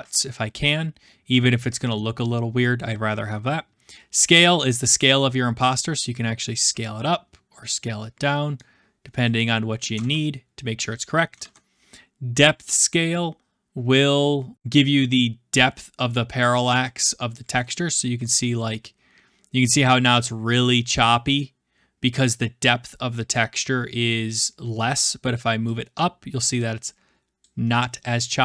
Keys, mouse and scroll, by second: 1.9 middle click, 5.0 click, 9.5-9.9 drag, 9.9 ctrl+z, 11.3 ctrl+z, 17.3-18.7 drag, 22.1-23.3 scroll, 23.4-24.4 middle drag, 27.4-28.4 drag.